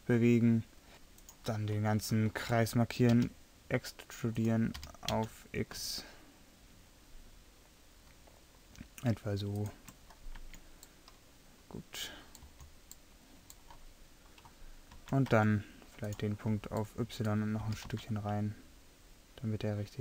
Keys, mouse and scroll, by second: 1.2-3.1 right drag, 3.2 e, 4.4 click, 4.8 g, 8.5-9.6 middle drag, 10.4 Tab, 12.5 z, 15.3 Tab, 17.7 g.